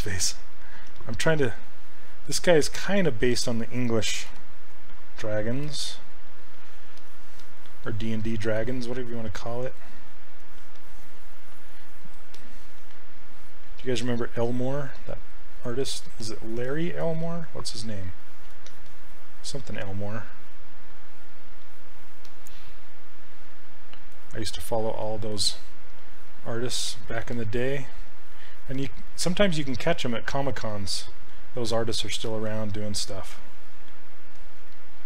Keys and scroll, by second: 0.9 s, 4.3 l, 5.7 s.